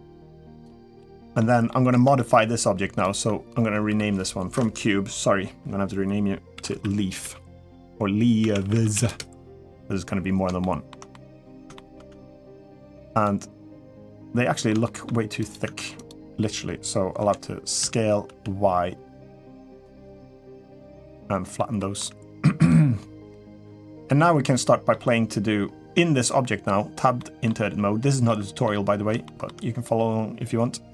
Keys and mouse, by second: 0.7-1.2 middle drag, 1.5 middle click, 1.9 shift+middle click, 3.6 F2, 10.4 shift+middle drag, 10.9 middle drag, 11.5 shift+middle drag, 13.0 click, 14.1 middle click, 14.6 shift+middle click, 15.2 click, 15.8 Tab, 15.8 click, 17.0 l, 17.6 s, 19.8-21.3 middle drag, 21.5 middle click, 22.1 g, 23.4 middle click, 24.2 middle click, 27.0 middle click, 28.0 middle click, 29.0 shift+middle click.